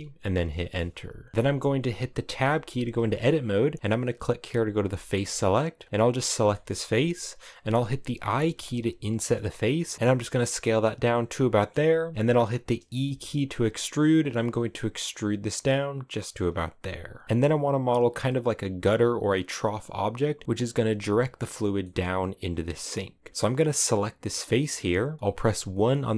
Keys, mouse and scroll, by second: 0.9 shift+scroll up 1, 1.1 shift+middle click, 2.0 Tab, 4.3 click, 4.6 shift+middle click, 4.8 scroll up 1, 5.6 right click, 6.0-7.9 shift+middle drag, 7.9 i, 9.9 s, 10.4 scroll down 1, 10.5-12.0 middle drag, 12.0-12.5 scroll up 2, 12.5 e, 16.0 scroll down 4, 16.2 right click, 16.4-23.5 middle drag, 23.5 right click, 25.7 KP_1.